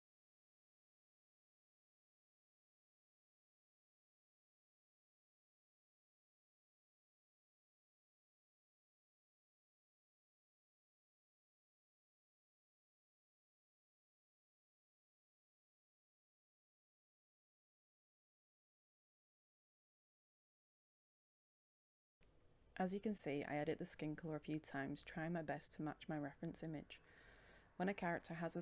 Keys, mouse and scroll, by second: 1.7 ctrl+shift+e, 2.0 click, 2.4 Return, 3.4-8.6 drag, 9.4-20.2 drag, 20.4 scroll up 1, 20.6 click, 21.4 right click, 21.6-28.6 drag.